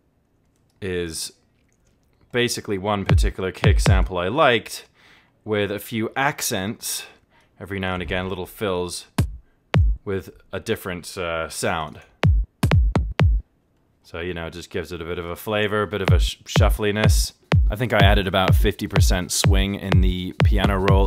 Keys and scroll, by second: 0.6 alt+z.